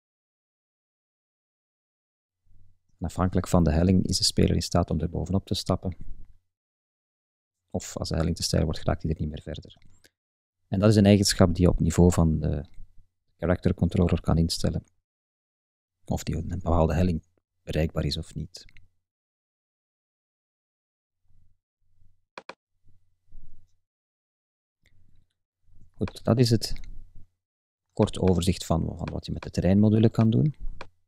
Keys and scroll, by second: 0.0 shift+Left, 0.2 shift+Up, 1.5 shift+Right, 1.8 shift+Up, 3.4 Left, 3.6 Up, 3.9 Right, 4.2 Up, 5.0 Right, 5.2 Up, 5.8 Right, 6.1 Up, 8.0 Left, 8.3 Up, 8.9 Left, 9.0 Up, 9.7 Left, 10.3 Up, 10.8 Right, 11.1 Up, 11.8 Right, 12.0 Up, 12.6 Left, 12.8 Up, 13.2 Left, 13.5 Up, 15.0 Left, 15.2 Up, 17.5 Right, 17.7 Up, 18.6 Left, 18.7 Up, 19.1 Left, 19.3 Up.